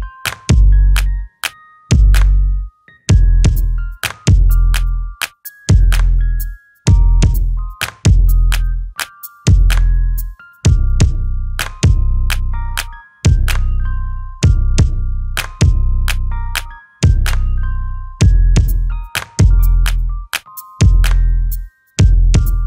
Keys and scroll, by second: 8.4 Escape, 12.7 space, 14.3 space, 15.0 m, 18.0 space.